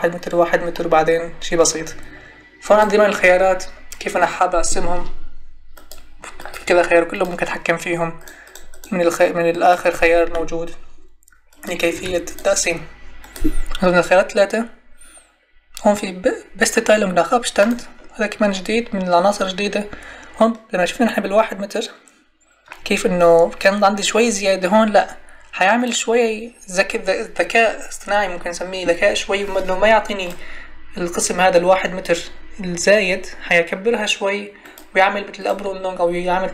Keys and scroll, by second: 11.9 3.